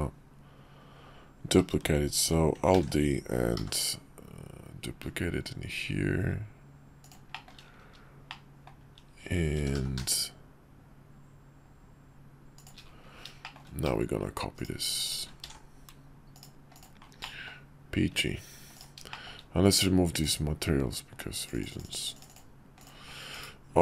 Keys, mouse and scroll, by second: 2.8 alt+d, 7.4 shift+middle click, 8.4 shift+middle click, 9.6 g, 15.4 alt+x, 16.3 click, 16.7 click, 17.2 middle drag, 18.7 click, 19.1 shift+middle click, 20.1 click, 21.4 click, 21.7 click, 23.3 /.